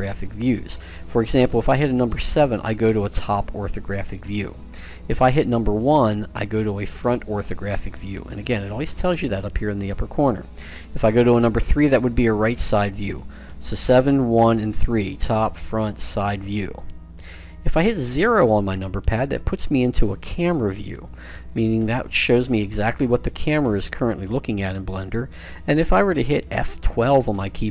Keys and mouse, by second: 1.5 KP_7, 5.2 KP_1, 10.7 KP_3, 13.3-15.8 typing, 18.7 KP_0, 21.8-27.7 middle drag.